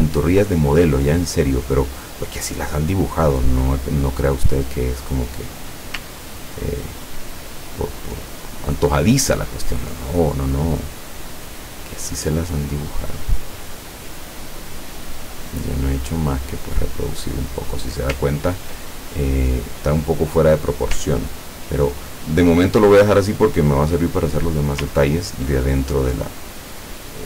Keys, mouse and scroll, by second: 0.1 ctrl+scroll down 2, 3.6 click, 6.2-9.6 ctrl+drag, 11.1-15.4 drag, 17.2-17.9 scroll up 1, 17.9-18.7 scroll down 2, 19.3 scroll up 1, 20.3 scroll up 2, 21.2-21.7 ctrl+scroll up 2, 23.5-24.7 drag, 25.1-25.5 ctrl+scroll down 2.